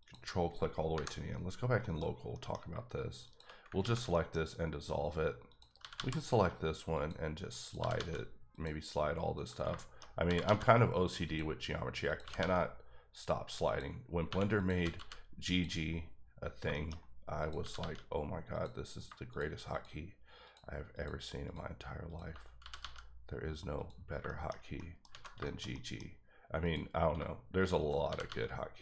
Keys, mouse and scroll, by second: 0.0 ctrl+click, 0.9 KP_Divide, 1.8 KP_Decimal, 2.3 middle click, 3.2 shift+click, 3.8 ctrl+x, 4.1 middle click, 5.5 click, 5.8 g, 5.9 g, 6.9 click, 7.6 click, 7.8 g, 7.9 g, 8.5 click, 9.3 click, 9.7 shift+middle click, 10.2 g, 10.4 g, 11.2 click, 12.1 click, 12.2 g, 13.6 click, 14.3 1, 14.6 click, 14.7 g, 15.0 g, 15.5 click, 16.7 shift+middle click, 17.4 click, 17.6 g, 17.7 g, 18.5 click, 19.7 shift+double click, 20.4 shift+click, 20.9 shift+click, 21.4 shift+double click, 22.1 shift+click, 22.6 g, 22.8 g, 23.7 click, 24.4 shift+middle click, 25.1 alt+a, 25.4 shift+middle click, 26.0-26.6 scroll up 1, 26.6 click, 28.0 g, 28.2 g.